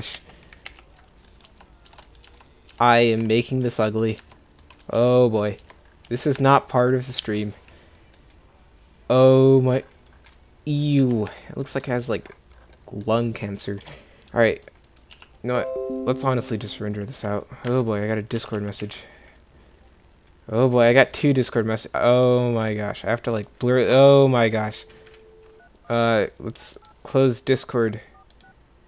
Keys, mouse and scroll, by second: 0.2 ctrl+z, 0.8 ctrl+z, 1.5 Tab, 2.0 Tab, 2.3 Tab, 2.8 Tab, 3.2 1, 3.7 Escape, 4.3 Tab, 4.7-6.0 drag, 5.1 Tab, 5.7 Tab, 6.2 a, 6.4 Tab, 11.1 Tab, 11.4 Tab, 13.9 KP_0, 14.6 click, 15.2 g, 16.6 s, 18.6 g.